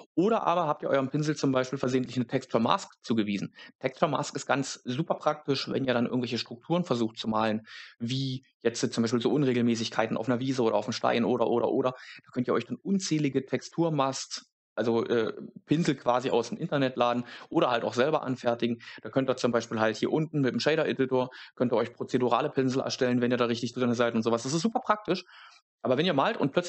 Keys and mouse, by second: 0.1 click, 16.1 click.